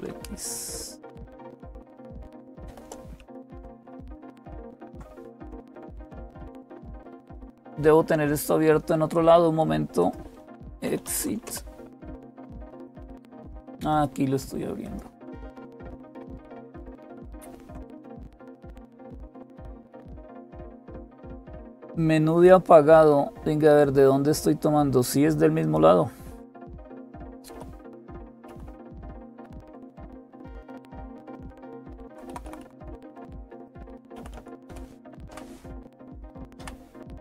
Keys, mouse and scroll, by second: 0.0-37.2 typing, 4.4 ctrl+x, 9.8 click, 13.1 click, 17.1 super+/, 19.2 click, 26.8 Up, 27.0 Up, 27.1 Up, 27.3 Up, 28.3 Up, 28.3 Right, 29.1-32.3 Right, 34.0-34.5 Left, 35.1 Right, 36.4 Right.